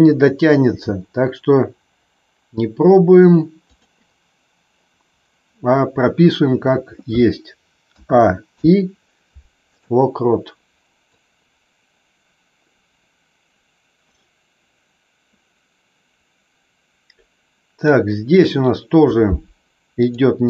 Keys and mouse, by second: 0.6 g, 3.7 click, 7.8 a, 8.4 i, 11.0-17.8 drag, 19.9 click.